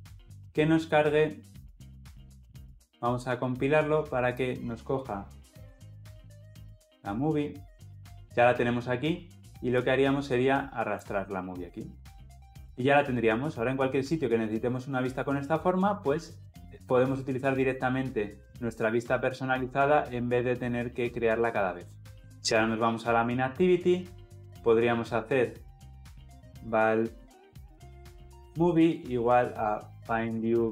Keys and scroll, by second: 4.2 ctrl+F9.